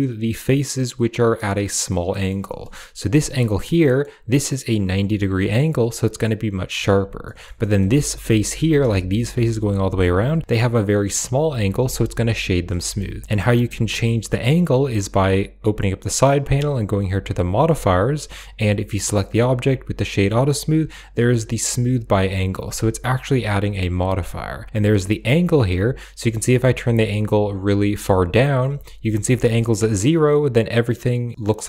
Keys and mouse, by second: 1.9 middle click, 2.3 shift+middle drag, 2.6 middle drag, 3.7-6.9 middle drag, 7.1 shift+middle drag, 7.5 middle drag, 7.8 shift+middle click, 8.4 Tab, 8.8 shift+middle click, 8.9 shift+click, 11.8 Tab, 12.7 shift+drag, 13.9 click, 15.0 click, 16.9 click, 17.4 click, 25.7-28.7 drag, 29.4-31.2 middle drag, 31.5 shift+middle click.